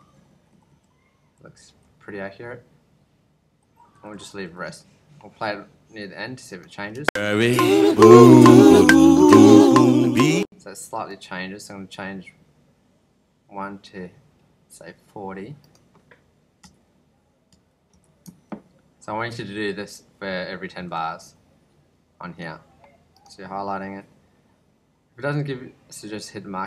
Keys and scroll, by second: 1.5 ctrl+Left, 3.9 ctrl+Left, 6.9 space, 10.1 space, 16.6 ,, 17.5 ., 17.9 ,, 18.5 ctrl+Right, 20.5 ctrl+Right.